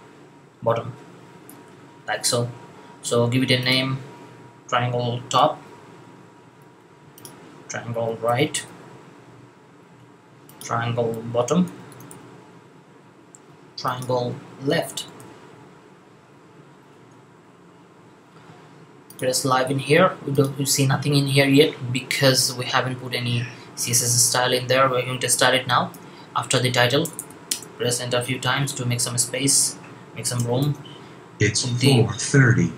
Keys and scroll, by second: 5.1 typing, 7.8-8.5 typing, 10.8-12.0 typing, 14.3-15.1 typing, 28.1 Up, 28.3 Up, 29.3 Down, 30.5 shift+,.